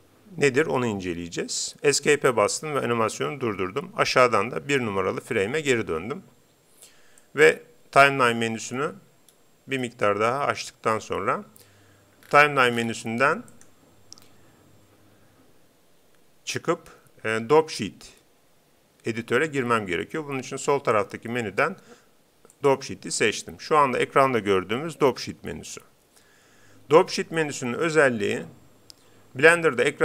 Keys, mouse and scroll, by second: 2.0 Escape, 4.2-5.8 drag, 7.2-8.8 drag, 9.3-11.6 middle drag, 12.2-13.5 scroll up 1, 13.5-15.1 drag, 25.1 Home.